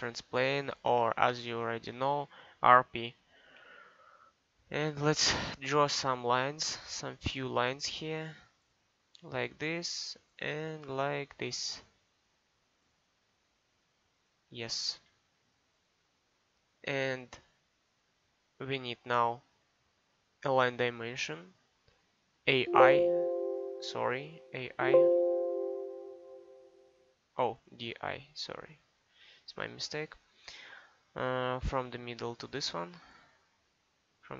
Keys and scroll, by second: 3.2 r, 3.5 p, 14.8 Escape, 22.4 a, 24.3 a, 28.4 d.